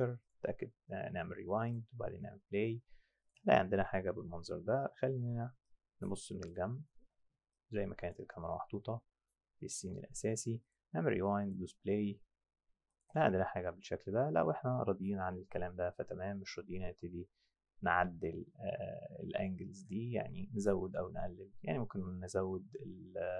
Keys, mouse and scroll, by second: 0.2 click, 1.7 click, 3.2 click, 5.7 alt+click, 6.7 alt+right drag, 7.5 alt+click, 8.3 alt+right click, 10.6 click, 11.4 click, 12.9 click, 19.7 click.